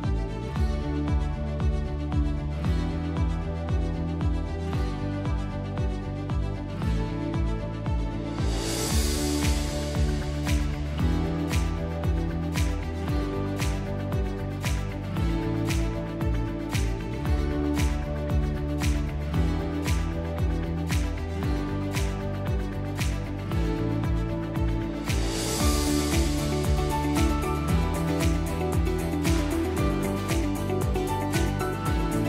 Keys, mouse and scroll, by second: 1.2 click, 1.8 F1, 4.1 click, 7.1 click, 10.0 click, 13.0 click, 15.1 click, 18.4 =, 18.6 =, 22.5 click, 25.5 click, 26.5 click, 27.8 click, 28.7 click, 28.7 click, 29.5 click, 29.5 click, 30.3 click, 30.7 Delete, 31.5 =.